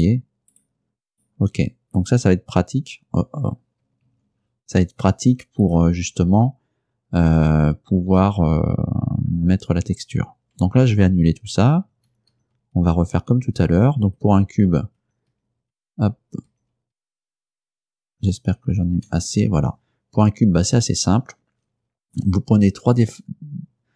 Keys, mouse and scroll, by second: 0.0 right click, 1.2 right click, 2.1 right click, 4.2 Escape, 5.7 right click, 11.9 ctrl+z, 15.1 ctrl+z, 16.6 ctrl+z, 22.1 right click, 23.0 right click.